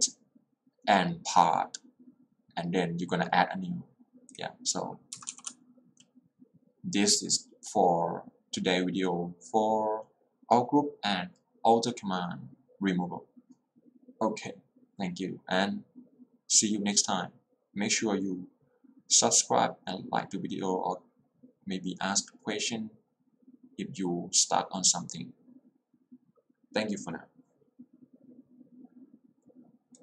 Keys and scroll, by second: 5.2 Escape, 5.4 j.